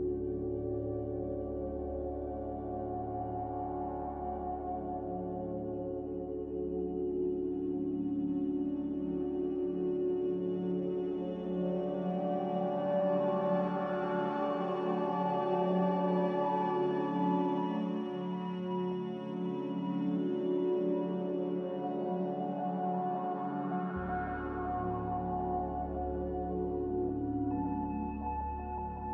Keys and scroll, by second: 5.8 z, 8.9 Return, 8.9 typing, 11.9 b, 13.8 typing, 14.6 Return, 18.0 m, 25.7 g.